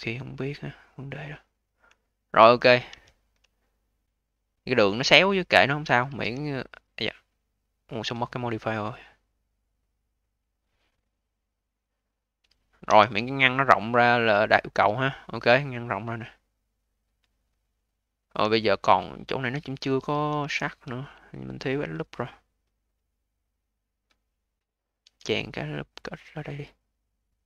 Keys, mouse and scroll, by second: 0.9-1.5 scroll up 1, 1.5-1.9 scroll down 2, 1.9-2.5 alt+drag, 2.8 d, 3.4-4.3 alt+drag, 4.3-5.3 alt+middle drag, 5.3 alt+click, 5.9 q, 8.1-12.1 drag, 12.7 v, 13.3 alt+click, 14.1-15.3 alt+middle drag, 15.3 alt+click, 16.1 alt+middle click, 16.5-18.5 alt+drag, 18.5-19.1 scroll up 4, 19.1 alt+middle click, 19.8 q, 20.3 v, 20.8-21.2 scroll up 5, 21.2 alt+middle click, 21.6-22.8 alt+drag, 22.8-24.9 scroll up 2, 24.9 a.